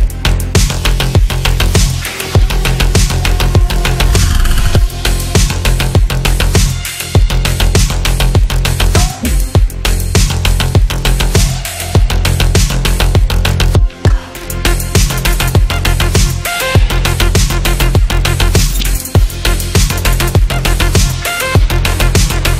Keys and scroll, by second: 21.9 F3, 22.2 Escape.